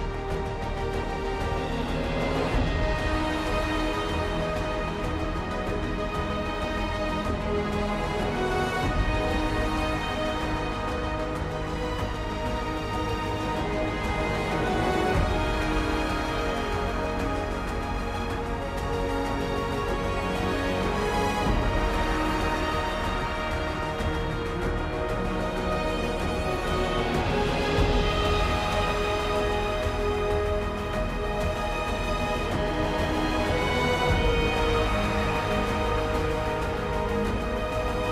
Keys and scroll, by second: 11.5 ctrl+u, 15.8 ctrl+u, 24.6 ctrl+u, 27.9 ctrl+z, 38.0 ctrl+t.